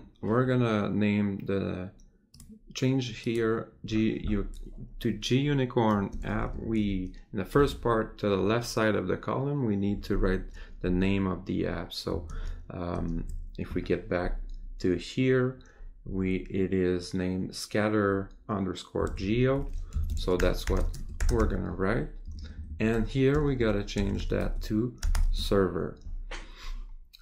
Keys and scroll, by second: 12.4 alt+Tab, 19.1 Tab.